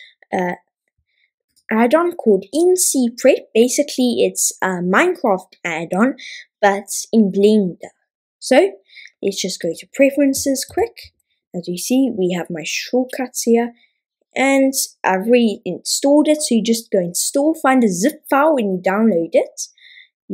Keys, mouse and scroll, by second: 9.6 click.